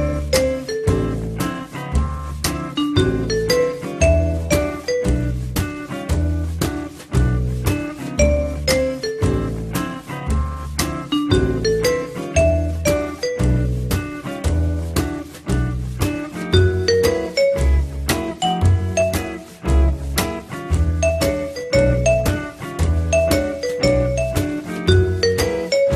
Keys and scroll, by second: 2.2 w, 10.6 p, 11.0 z, 12.9 F3, 17.8 z, 21.8 m.